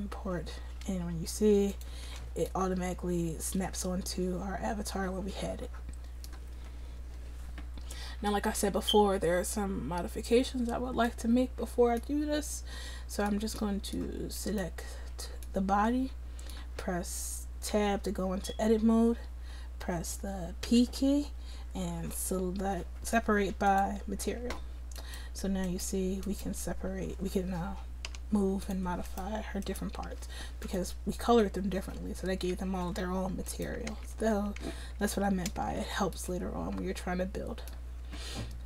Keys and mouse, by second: 1.8-5.0 drag, 12.7-14.5 drag, 14.5-17.8 right drag, 17.8 Tab, 21.0 p, 24.5 Tab, 25.0-32.8 drag, 28.1 g, 30.1 g, 32.8 ctrl+z, 33.6-35.6 drag, 33.9 ctrl+z, 34.7 ctrl+z, 35.0 ctrl+z, 35.6 ctrl+z.